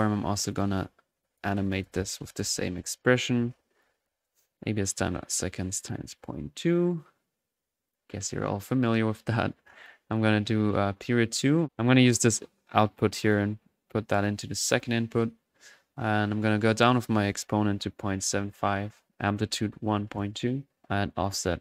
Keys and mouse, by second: 0.5-0.8 drag, 5.8 click, 9.6 click, 9.8 2, 10.5-11.5 middle drag, 11.5 drag, 11.7 ctrl+z, 11.8-13.5 ctrl+drag, 14.0 middle click, 14.7-15.1 drag, 16.8-17.1 drag, 19.3 drag, 21.2-21.6 drag.